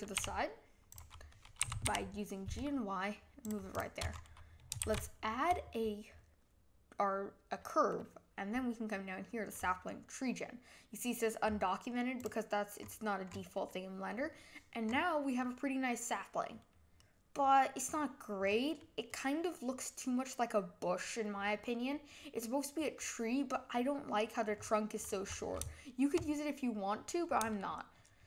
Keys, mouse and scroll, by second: 0.1 s, 1.3 middle click, 1.6 g, 3.7 drag, 4.1 scroll up 4, 4.8 shift+a, 12.8-14.9 scroll up 7, 14.9 scroll up 6, 15.4-17.8 middle drag, 17.8-18.8 scroll down 7, 18.8-21.9 middle drag, 24.5-25.9 scroll up 6, 27.5-28.2 shift+middle drag.